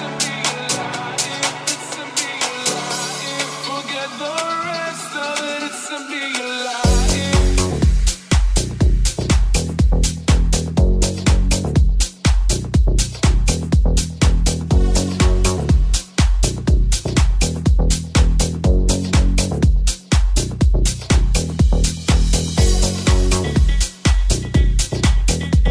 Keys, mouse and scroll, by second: 12.0 ctrl+Tab, 12.7 ctrl+Tab, 12.7-25.7 ctrl+drag.